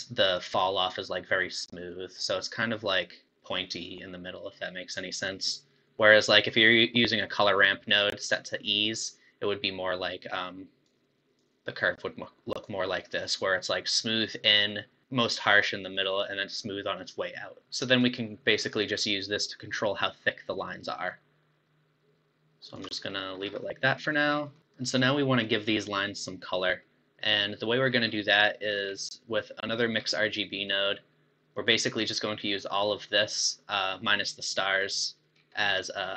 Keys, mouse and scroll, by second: 7.5-10.5 drag, 11.4-14.4 drag, 18.0-21.0 shift+drag, 23.4 scroll down 3, 23.6-24.2 middle drag, 24.2-24.6 scroll up 4, 27.5-28.1 middle drag, 28.1 scroll up 4, 28.5 middle click, 28.8-29.2 scroll down 6, 30.0-30.4 scroll up 4, 30.7-31.5 middle drag, 31.5 click, 33.8-35.3 middle drag, 35.3-35.8 scroll up 6, 35.8-36.1 middle drag.